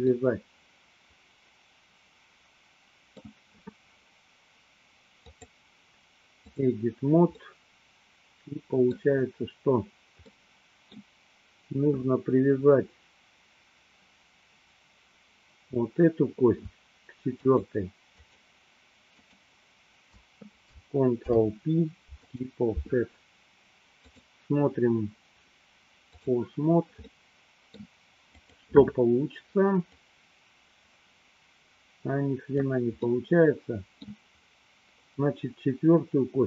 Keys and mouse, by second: 0.2-3.5 middle drag, 5.3-6.5 drag, 7.4-9.3 middle drag, 10.4 middle click, 17.3 shift+click, 18.4 shift+click, 19.3 shift+click, 21.2 ctrl+p, 24.2-26.3 drag, 27.2 middle click, 28.4 click, 30.0-32.8 drag, 33.2-34.3 middle drag.